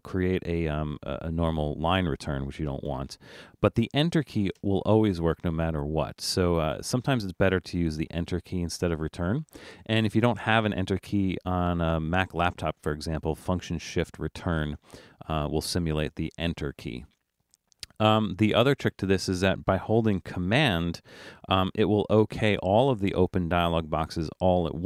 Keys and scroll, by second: 2.9 BackSpace.